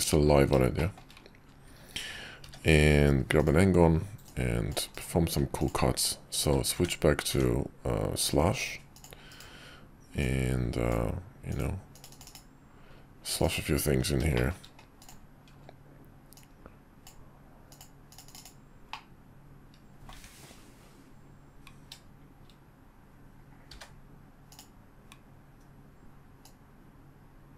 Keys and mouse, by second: 0.0 drag, 0.7 middle drag, 2.4 d, 4.2 click, 6.7 d, 7.3 d, 10.2-10.9 drag, 14.3 shift+middle click, 15.0-15.5 drag, 16.4-17.1 drag, 18.9-20.2 middle drag, 20.1 `, 22.4 `, 23.7 d, 26.4-27.5 drag.